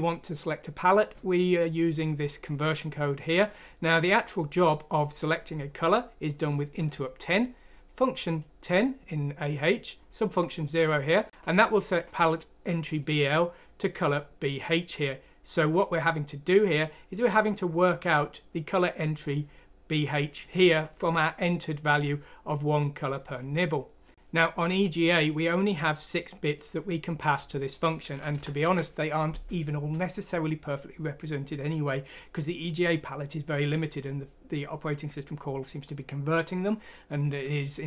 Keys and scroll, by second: 28.3 Left.